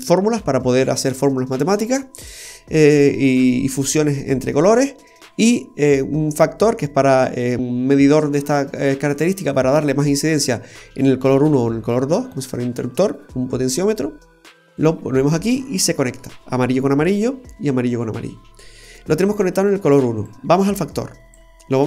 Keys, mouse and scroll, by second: 2.2 click, 14.3 click, 15.6 middle click, 18.7-19.2 scroll up 2, 19.2 scroll down 2, 20.2 click.